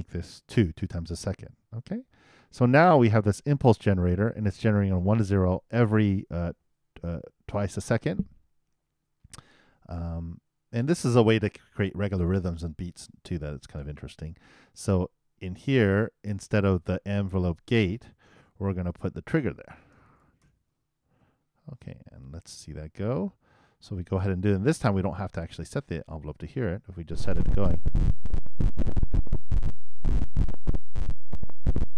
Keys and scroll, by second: 21.8 super+i, 22.1 super+Return, 27.0 super+Return.